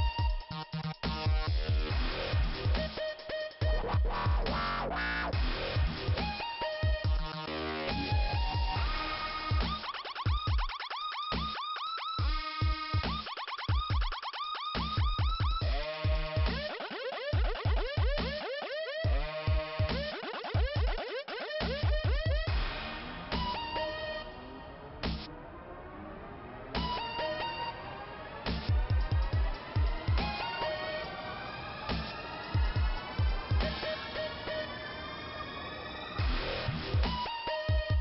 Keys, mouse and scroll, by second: 2.2 scroll down 2, 6.1 click, 8.5 click, 9.4 click, 10.8 click, 12.6 click, 13.2 scroll down 1, 15.9 click, 21.2 click, 22.0 click, 22.1 click, 24.3 click, 26.8 click, 27.3 scroll down 2, 31.1 scroll up 2, 33.8 click, 34.3 scroll down 2.